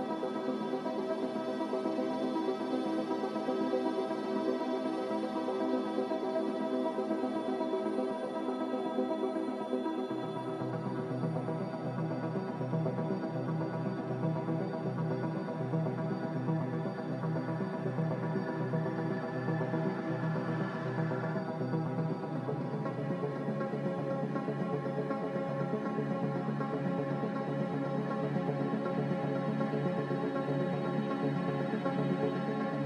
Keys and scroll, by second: 5.0 5, 6.1 1, 11.8 1, 12.0 Return, 23.4-29.5 typing, 30.8 z.